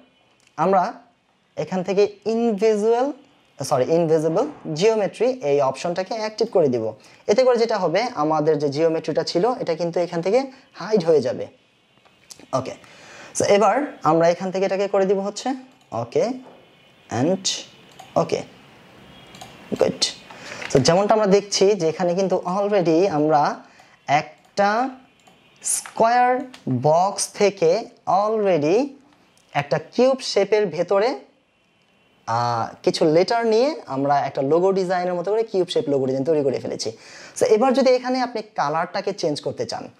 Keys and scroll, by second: 20.8 ctrl+KP_0, 25.0 ctrl+space.